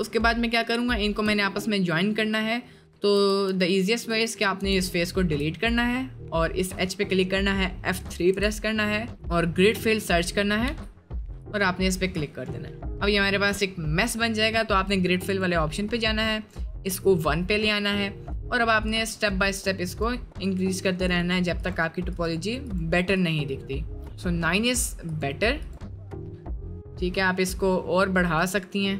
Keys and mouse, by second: 0.5 click, 1.0 shift+middle click, 3.2 x, 4.6 1, 5.0 alt+click, 5.5 middle click, 8.3 F3, 12.2 middle click, 12.7 middle click, 13.2 middle click, 17.2 click, 17.8 middle click, 22.7 click, 25.2 click, 26.1 click, 26.9-28.9 drag.